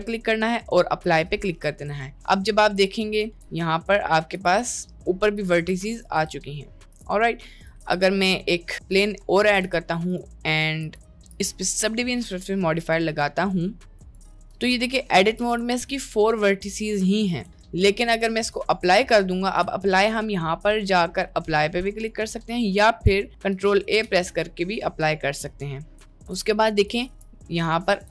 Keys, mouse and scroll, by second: 1.7 Tab, 3.4 g, 4.8 g, 5.4 click, 5.8 g, 6.4 Tab, 7.4 middle drag, 7.8 shift+a, 9.8 g, 10.9-13.0 drag, 13.4 middle click, 14.0 click, 14.5 Tab, 14.9 middle click, 15.7 g, 17.0 g, 17.5 Tab, 18.5 ctrl+a, 19.6 ctrl+z, 20.1-22.6 drag, 24.1 ctrl+a, 25.8 middle click, 26.0 Tab, 26.4 click, 26.9 click, 27.1 g, 28.0 click.